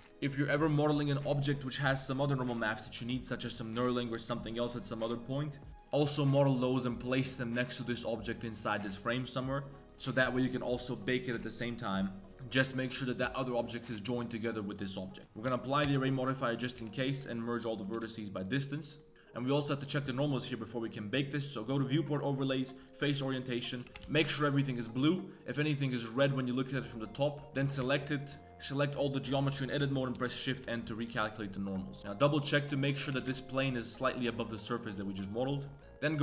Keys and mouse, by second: 0.0 Tab, 0.0 g, 0.0 a, 6.8 click, 12.3 middle click, 13.6 click, 15.8 ctrl+a, 16.4 Tab, 16.7 a, 17.9 m, 18.8 middle click, 19.4 middle click, 20.6-23.1 drag, 23.2 middle click, 23.4 middle click, 23.7 g, 23.9 Tab, 23.9 g, 25.0 middle click, 25.4 click, 25.7 click, 26.1 middle click, 26.9-27.3 drag, 27.5 Tab, 27.8 a, 30.1 shift+n, 30.8 shift+n, 32.0 click, 33.0 g, 33.8-34.4 middle drag, 34.8 middle click, 35.0 z, 35.2 click, 35.4 z, 35.6 drag.